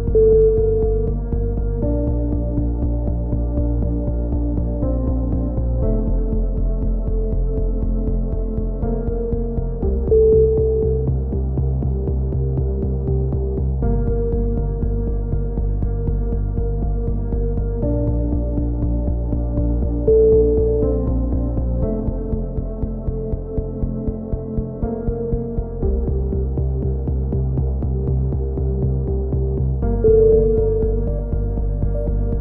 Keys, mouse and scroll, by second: 0.2 e, 1.8 click, 4.1 s, 5.7 click, 13.1 s, 15.5 click, 17.1 s, 24.9-26.1 drag, 26.7 click, 30.5 click, 31.5 ctrl+z, 31.7 ctrl+z, 32.2 ctrl+z.